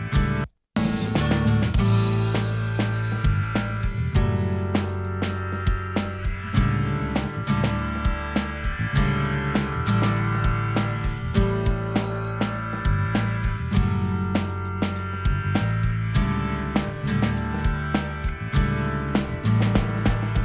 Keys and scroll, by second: 0.1 space.